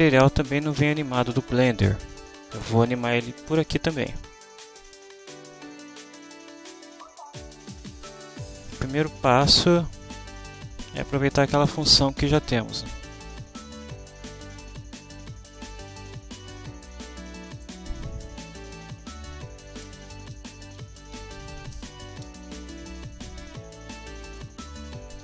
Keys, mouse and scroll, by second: 9.8-11.4 drag, 15.6 click, 17.1 click, 17.6 click, 18.5 Home, 18.9 shift+End, 19.1 shift+Delete, 19.8 Return, 19.9-21.9 typing, 23.1 click, 24.3 click, 24.7-25.2 typing.